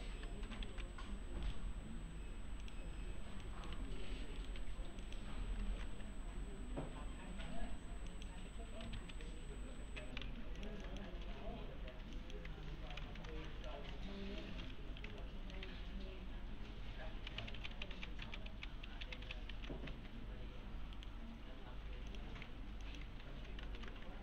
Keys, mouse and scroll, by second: 0.6 ctrl+z, 1.5 right click, 2.6 click, 3.4 middle click, 3.7 alt+1, 4.4 right click, 4.6 2, 5.0 click, 5.7 ctrl+shift+e, 8.1 click, 9.0 ctrl+z, 9.8 alt+r, 10.6 shift+click, 11.3 2, 11.9 2, 12.2 click, 12.7 alt+r, 13.2 ctrl+shift+e, 13.5 middle click, 14.6 F4, 15.2-15.9 alt+middle click, 15.7 2, 17.4 ctrl+z, 19.9 2, 21.0 right click, 22.1 click, 22.5 2, 22.8 click, 23.2 alt+r, 23.8 ctrl+shift+e.